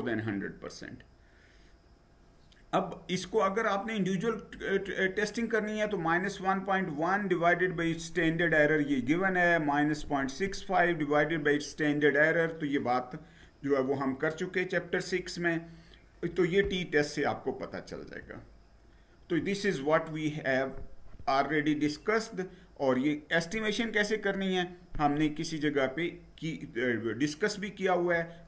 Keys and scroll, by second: 18.0 Down.